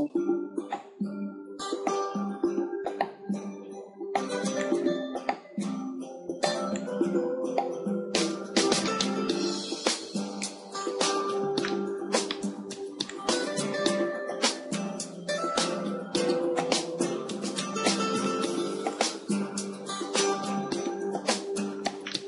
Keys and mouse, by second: 0.0-11.6 drag, 11.6-13.2 middle drag, 13.2-18.9 drag, 19.6-21.7 drag, 21.7-22.2 middle drag.